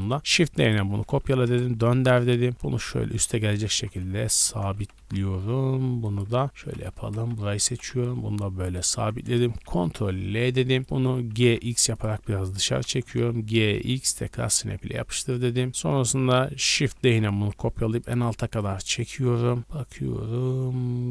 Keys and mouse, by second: 0.2 shift+d, 0.9 r, 2.5 g, 3.0-4.0 ctrl+middle drag, 3.5 g, 4.0 ctrl+click, 4.5 middle click, 4.7 g, 5.3 ctrl+click, 6.1-7.4 middle drag, 6.3-7.6 typing, 9.8 ctrl+l, 9.9 ctrl+click, 10.8 middle click, 11.3 g, 12.7 g, 14.8-20.1 shift+middle drag, 16.8 shift+d, 20.1-21.1 drag.